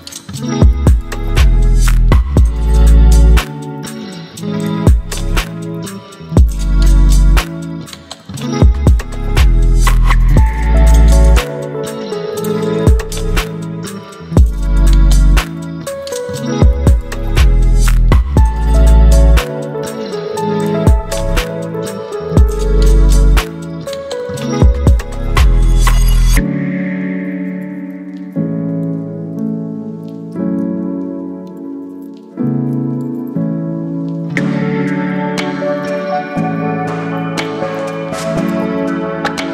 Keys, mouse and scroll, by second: 4.8 scroll up 1, 6.0 space, 6.0-6.6 click, 6.5 space, 7.2-8.8 drag, 9.5 ctrl+t, 11.9-13.5 alt+drag, 14.0 right click, 15.3 click, 17.0-18.2 alt+drag, 30.4-31.7 ctrl+drag, 38.5 ctrl+t.